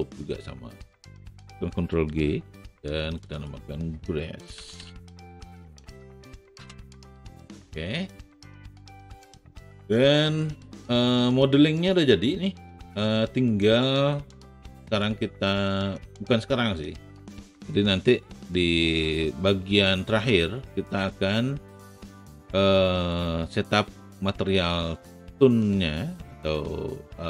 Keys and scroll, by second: 2.2 ctrl+g, 4.5-5.4 typing, 6.5 Return, 20.2 a.